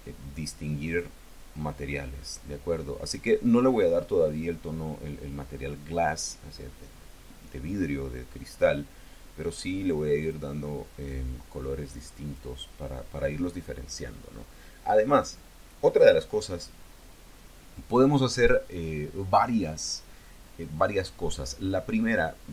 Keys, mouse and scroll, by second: 0.7 click, 2.9 click, 10.0 click, 10.9-12.4 drag.